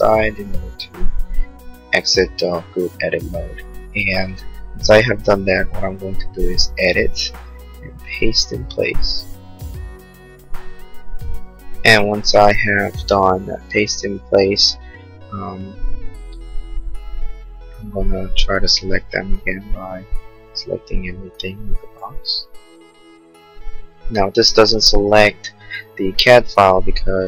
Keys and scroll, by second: 2.9 ctrl+z.